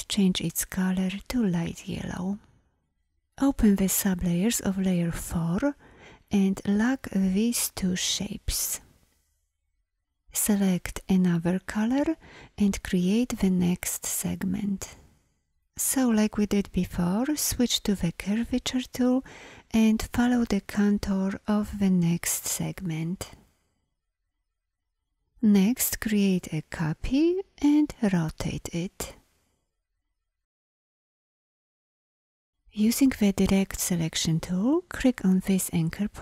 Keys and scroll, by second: 18.1 shift+`, 25.8 v, 27.6 r, 33.2 a.